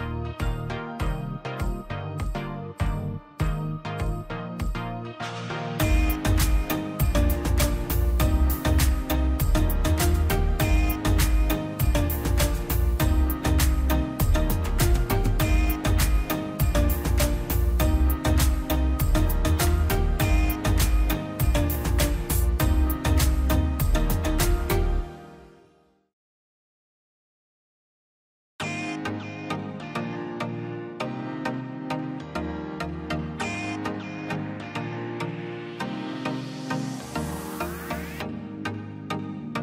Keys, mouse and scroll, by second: 2.0 ctrl+z, 2.9 click, 4.8 space, 5.0-5.4 scroll up 1, 5.4 p, 5.7 click, 6.1 space, 6.6 middle click, 7.1 click, 7.7 Delete, 7.9 scroll down 1, 8.2 middle click, 8.5 scroll up 1, 8.6 click, 9.3 m, 9.8 click, 9.9 scroll down 1, 11.4 scroll up 1, 11.4 click, 11.7 space, 12.1 middle click, 12.2 scroll down 1, 12.9 click, 13.3 Escape, 13.6 click, 16.3 ctrl+z, 16.4 scroll down 1, 17.4 click, 18.0-19.4 scroll down 1, 20.6 middle click, 20.9-21.4 scroll up 1, 21.4 middle click, 21.6-22.1 scroll up 1, 22.3-24.6 drag, 24.6 scroll down 1, 25.5 click, 25.6 scroll up 1, 26.2 p, 26.4-27.6 drag, 27.6-28.1 scroll up 1, 28.1 click, 28.9 scroll down 1, 29.6 middle click, 30.2 scroll down 1, 30.5 middle click, 30.7 scroll up 1, 32.3 middle click, 33.0 middle click, 33.9 scroll up 1, 34.1-38.3 drag, 38.3 scroll down 1, 38.6 middle click, 39.1 scroll up 1.